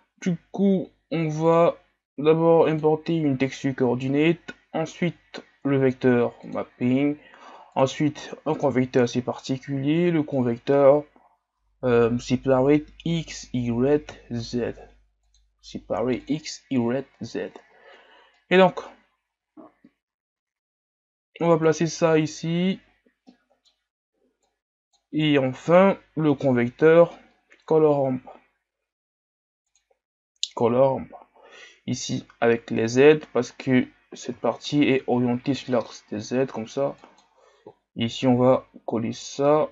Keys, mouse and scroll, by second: 32.0 click, 33.9-34.5 scroll down 4, 34.5 shift+scroll up 3, 35.2 scroll down 4.